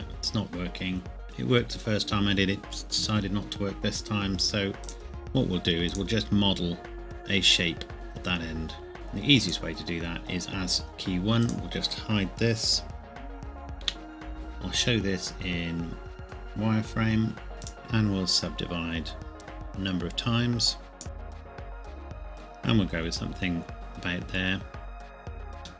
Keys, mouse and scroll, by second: 1.2 click, 4.8 click, 13.8 h, 14.3-14.7 scroll down 1, 16.2 click, 17.7 right click, 19.3 click, 21.1 KP_Enter, 21.2 click, 21.4 middle click, 21.5 ctrl+KP_7, 21.7 ctrl+KP_Add, 21.9 z, 21.9 click, 22.3-22.9 scroll down 1, 24.6 scroll down 1, 24.8 scroll up 1, 24.9 Tab.